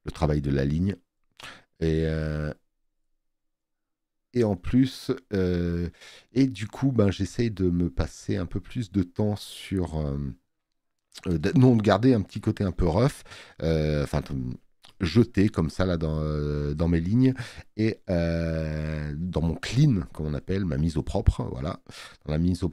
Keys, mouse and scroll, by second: 14.7 space, 15.0 click.